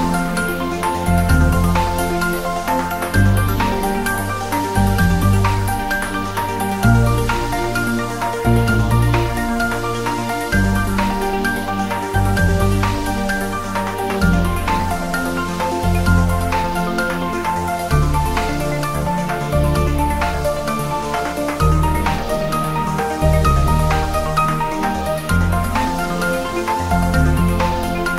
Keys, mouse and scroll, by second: 0.2 ctrl+r, 0.5 click, 2.0 click, 2.2 Tab, 3.0 scroll up 1, 4.0 click, 4.1 scroll down 1, 11.4 click, 12.4-13.1 scroll down 1, 13.1 click, 13.4-14.0 scroll down 1, 14.6 click, 15.9 click, 16.2-16.7 scroll up 2, 16.8 shift+d, 17.8 click, 17.9 s, 18.8 click, 19.1 s, 19.9 click, 20.4 s, 20.6 click, 21.6 r, 22.5 click, 22.7-23.1 scroll down 1, 23.6 r, 23.9 click, 24.0-24.4 scroll up 1, 24.4 g, 25.7 click, 25.8-26.3 scroll down 1, 26.3 r, 26.8 click, 27.0 scroll up 1, 27.4 g.